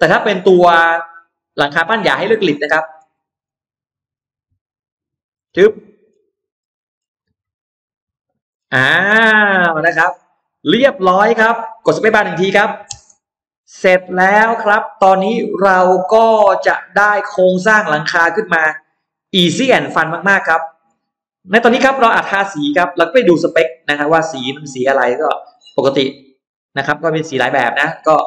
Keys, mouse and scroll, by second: 1.4-1.7 scroll down 2, 1.7 middle click, 1.8 scroll up 1, 2.0 scroll down 1, 2.2-4.2 scroll up 4, 2.3 middle click, 4.8 click, 5.2 scroll down 2, 5.5 middle click, 6.0 scroll down 2, 6.4-6.7 scroll up 2, 6.6 middle click, 6.8-7.2 scroll down 1, 8.0 click, 8.4-9.4 scroll down 2, 9.6 middle click, 9.8 scroll down 2, 10.4-12.0 middle drag, 12.8 space, 13.0 click, 13.4 middle click, 13.6-14.0 scroll down 1, 14.1-16.2 middle drag, 16.4-17.5 scroll up 3, 17.6 middle click, 18.3-19.0 scroll down 3, 19.1 middle click, 19.8 scroll down 2, 21.6 b, 22.6 click, 23.9 click, 25.0-25.3 scroll down 2, 25.8-27.0 scroll down 6.